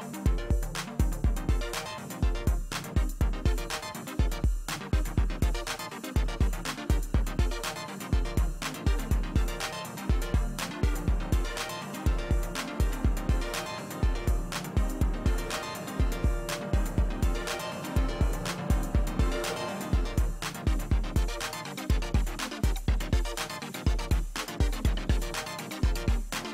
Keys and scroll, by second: 20.4 space, 26.2 ctrl+alt+z.